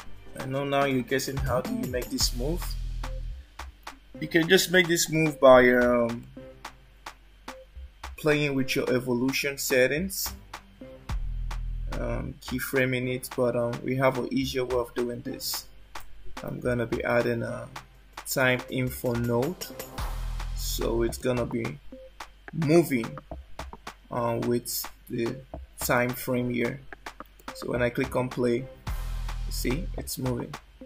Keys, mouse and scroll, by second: 6.3 click, 16.5 shift+a, 22.7 click, 27.5 click.